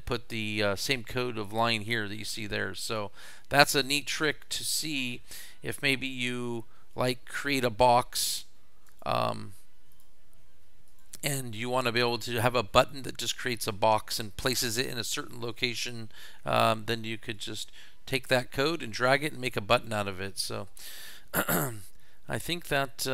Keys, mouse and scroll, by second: 2.8 click, 4.0 click, 5.7 click, 6.9 click, 7.4 click, 7.9 click, 8.9 click, 9.9 click, 10.9 click, 12.0 click, 15.5 drag, 17.4-18.4 drag, 19.8 click, 20.2 middle click.